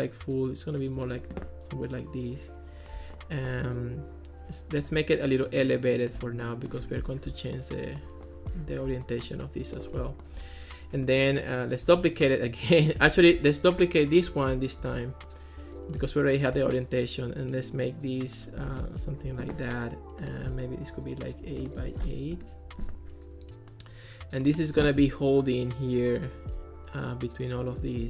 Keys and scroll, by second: 11.9 super+d, 13.1 super+z, 14.8 super+d, 21.5 8, 22.3 Return.